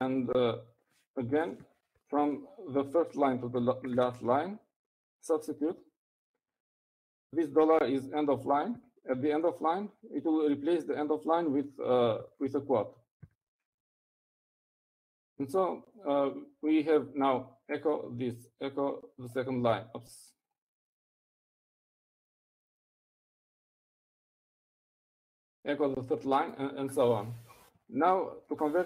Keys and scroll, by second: 1.3 typing, 2.7-3.5 typing, 5.3 typing, 6.8 typing, 8.5-8.8 typing, 10.5 typing, 13.5-14.8 typing.